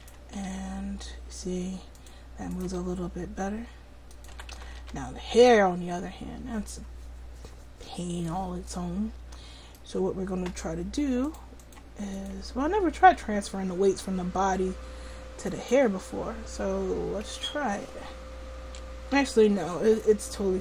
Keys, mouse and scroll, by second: 0.4 r, 2.8 r, 4.4 a, 4.6 a, 4.9 alt+r, 11.3-20.1 drag.